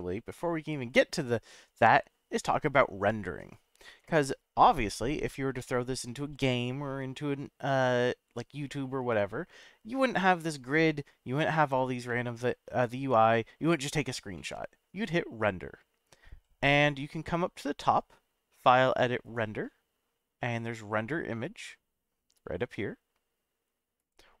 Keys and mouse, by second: 5.6-7.9 middle drag, 12.1-12.8 middle drag, 14.3 middle click, 19.2-24.4 drag.